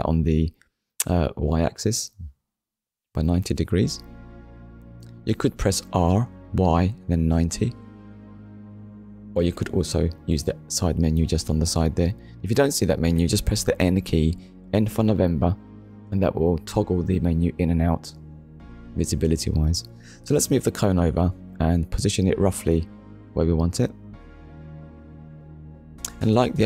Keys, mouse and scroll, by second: 8.4 click, 10.1 Return, 11.2 middle click, 12.4 KP_1, 13.6 click, 15.0 click, 16.3 click, 18.2 shift+middle click, 25.1 click.